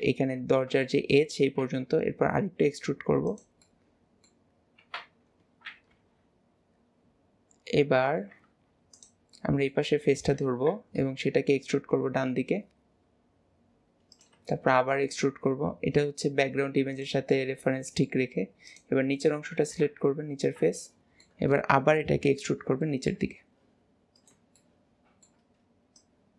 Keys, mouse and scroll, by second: 0.9 middle click, 3.6-5.0 middle drag, 7.8-8.5 middle drag, 8.5 Tab, 9.4-10.6 middle drag, 14.5 shift+middle click, 17.3-18.7 middle drag, 19.9 KP_1, 20.8-22.6 shift+middle drag, 22.6 scroll down 1, 22.9 shift+middle click, 23.4 e, 24.6-26.0 shift+middle drag, 26.0 click.